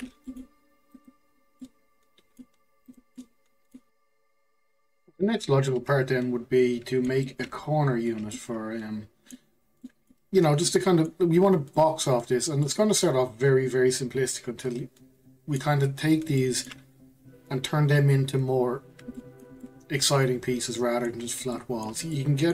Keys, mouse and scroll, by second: 1.3 scroll down 4, 1.6 middle click, 2.6 scroll up 1, 2.9 click, 3.2 middle click, 5.7-15.7 middle drag, 16.4-22.5 shift+middle drag.